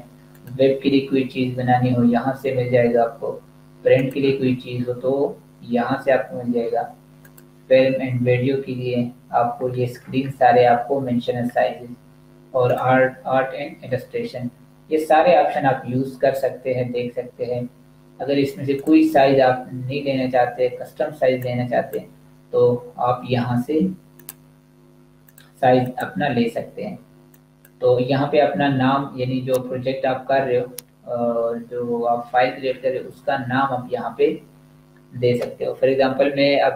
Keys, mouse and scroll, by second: 0.6 click, 10.0-10.8 scroll up 1, 10.9-11.9 scroll down 1, 12.5 click, 14.8 scroll down 1, 16.2-17.7 scroll up 1, 18.8 click, 21.3 click.